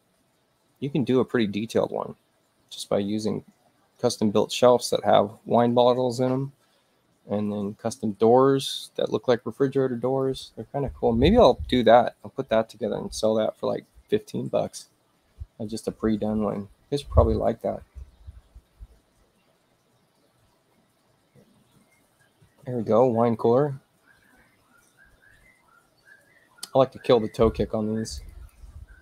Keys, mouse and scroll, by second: 7.7 middle click, 10.2 click, 17.5 click, 21.2 space, 28.0 click, 28.3 click.